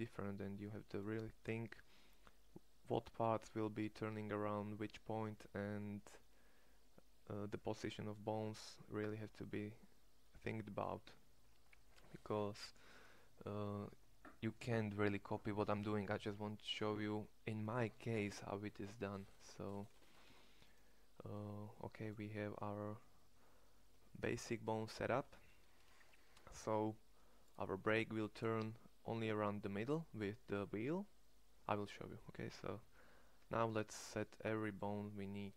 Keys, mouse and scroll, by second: 20.2 Tab, 27.8-31.5 middle drag.